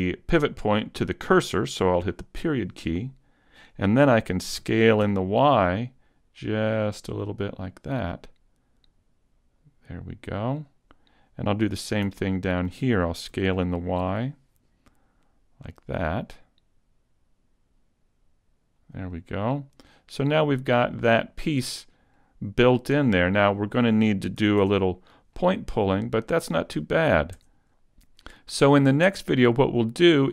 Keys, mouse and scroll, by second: 2.4 ., 4.6 s, 10.8 click, 11.7 alt+right click, 13.3 s, 18.9 click, 19.1 middle click, 21.7-22.1 scroll up 2, 22.1 middle click, 23.2 scroll down 1, 23.6 middle click, 24.4 a, 24.6 Tab, 25.3 middle click, 26.5 right click, 27.3 Tab, 27.9 middle click, 27.9 scroll down 1, 29.7 scroll down 1.